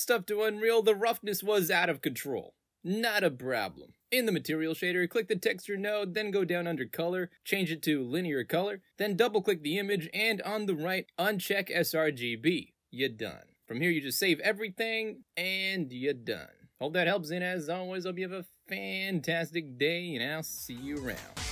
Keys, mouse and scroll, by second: 2.9 right click, 4.0 click, 5.2 middle click, 5.4 scroll down 2, 6.8 click, 8.2 click, 9.1 click, 12.1 click, 13.7 click, 14.5 click, 15.2 click, 15.8 alt+click, 16.9 alt+middle click, 17.7-19.8 alt+drag, 20.0 alt+right click, 20.4 alt+middle click, 20.9 alt+click.